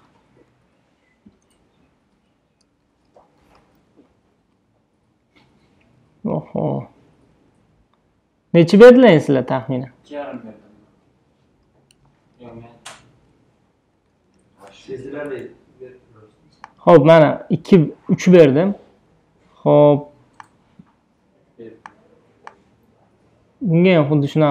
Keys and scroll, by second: 0.0 5, 2.2 BackSpace, 3.4 1, 3.8 0, 6.0 BackSpace, 8.0 2, 9.6 BackSpace, 11.4 2, 12.0 ,, 12.3 5, 13.1 BackSpace, 14.4 3.